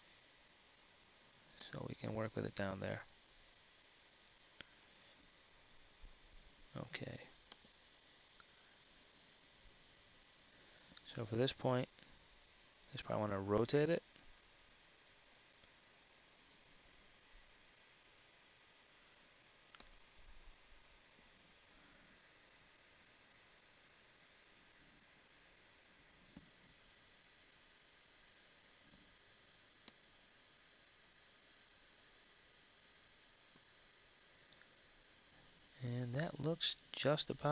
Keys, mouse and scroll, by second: 5.1 KP_1, 11.2 KP_3, 13.8 r, 21.8 r, 25.3 z, 36.2 KP_1.